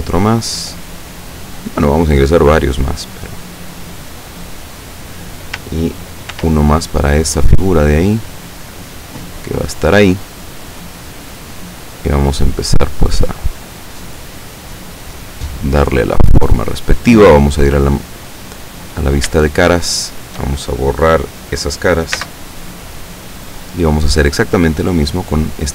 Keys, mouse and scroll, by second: 0.1 ctrl+click, 1.8 click, 2.3 right click, 3.0-5.2 drag, 6.4 ctrl+r, 6.8 ctrl+click, 9.9 click, 10.8 right click, 11.4 click, 12.7 right click, 13.2-15.0 drag, 15.5 right click, 16.0 click, 18.0 click, 19.1 shift+right click, 19.7 shift+right click, 20.1 shift+right click, 22.3 x, 23.0 click.